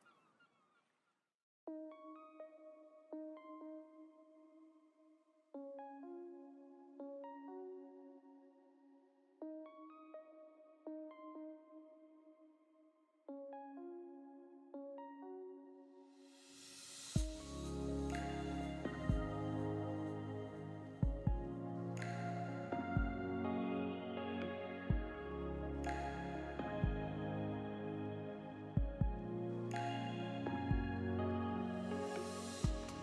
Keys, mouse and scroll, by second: 0.2 middle click, 0.6 shift+middle click, 1.5 alt+a, 2.0 l, 2.6 s, 3.5 click, 5.1 alt+a, 5.7-6.0 scroll down 3, 5.9 middle click, 6.7 Tab, 7.1 alt+a, 7.3 scroll down 2, 7.5 middle click, 8.3 middle click, 8.8 scroll down 1, 9.0 shift+middle click, 9.2 middle click, 10.6 click, 10.8 scroll up 1, 11.0 middle click, 11.8 click, 12.6 alt+a, 12.8 middle click, 17.5 click, 22.0 click, 24.3 BackSpace, 24.8 BackSpace, 26.9 middle click, 28.6 click, 31.0 scroll down 2, 31.2 shift+middle click, 32.0 click.